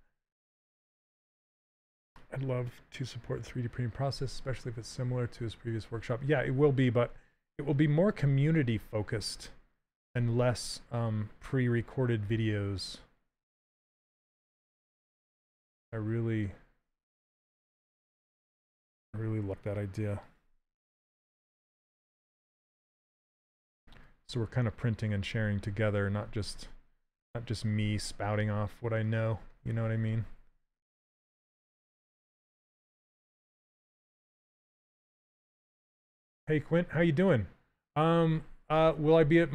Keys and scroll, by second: 9.0 s, 15.0 s, 23.0 s, 28.0 s.